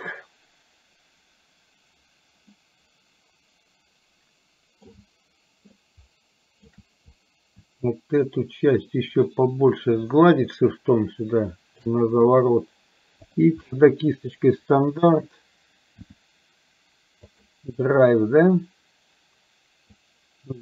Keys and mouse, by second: 2.6-5.0 middle drag, 5.8-6.8 shift+middle drag, 8.0-11.8 shift+drag, 13.3 click, 16.0 f, 20.0-20.6 ctrl+drag.